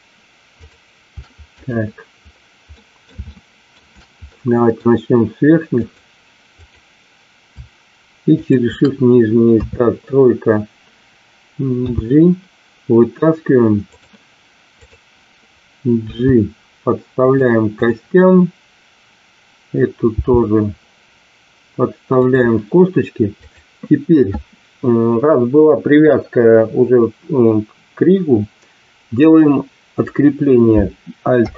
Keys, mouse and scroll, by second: 0.6 shift+click, 2.8 middle click, 3.3-3.7 shift+middle drag, 4.3 middle click, 5.8 click, 6.5 click, 8.3 shift+click, 9.5 KP_3, 11.8 g, 14.7 click, 16.0 g, 20.0 g, 31.3 alt+p.